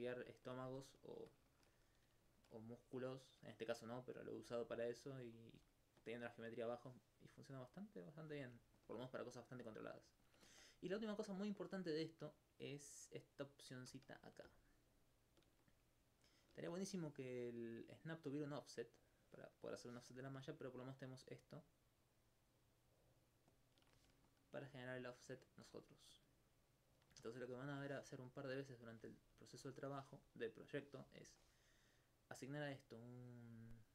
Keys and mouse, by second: 4.8 alt+click, 7.8 click, 14.9 shift+click, 21.3 shift+click, 24.3 alt+click, 24.7 alt+click, 28.6 right click, 32.0 click.